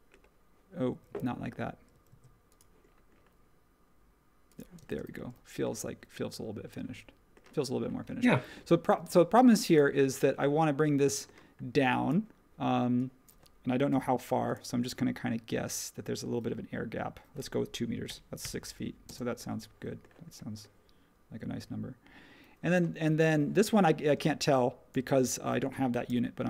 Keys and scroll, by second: 1.0 super+z, 2.1 super+z, 4.8 space, 4.9 e, 8.9 space, 13.9 m, 18.0 2, 18.4 Return, 19.0 space, 20.2 typing.